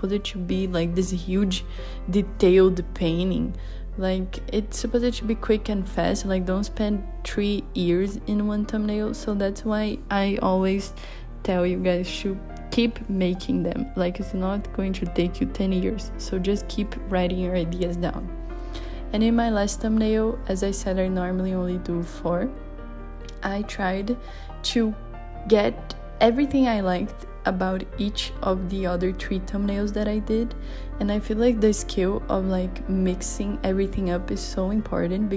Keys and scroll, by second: 21.9 super+z, 33.1 i, 35.2 b.